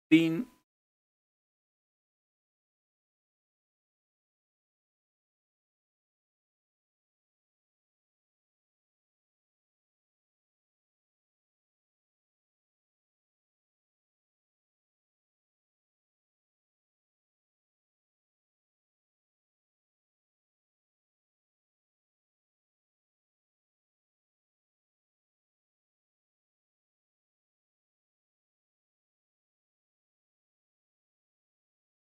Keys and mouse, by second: 0.0-1.2 typing, 3.4 typing, 10.0 shift+g, 11.8 Up, 12.5 Up, 12.8 Up, 15.0-18.1 typing, 25.8-27.5 typing, 28.8-32.1 typing.